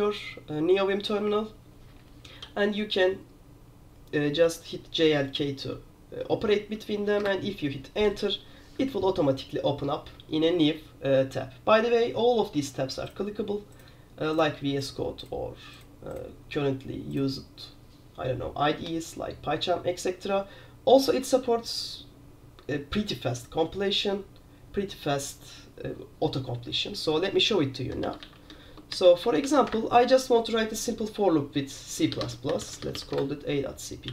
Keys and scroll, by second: 2.5-7.5 typing, 8.9 F1, 27.9-29.5 typing, 29.8 Return, 30.7 typing, 31.8-34.1 typing.